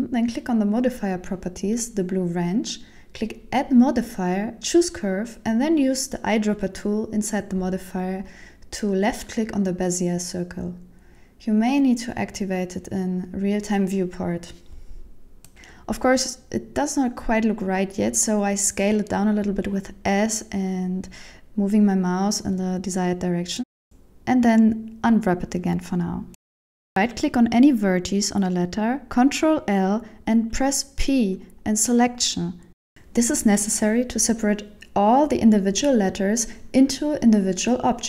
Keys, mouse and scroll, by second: 4.0 click, 10.6 click, 12.5 shift+middle click, 13.0-13.3 scroll up 2, 14.0 middle click, 18.9 s, 23.2 middle click, 24.9 click, 26.5 Tab, 26.5 scroll up 2, 26.5 KP_7, 26.6 shift+middle click, 27.7 right click, 28.6 ctrl+l, 30.3 p, 32.4 Tab, 33.1 Tab, 33.5 right click, 34.2 ctrl+l, 34.5 p, 35.6 Tab, 36.0 Tab, 36.6 right click, 37.2 ctrl+l, 37.4 p.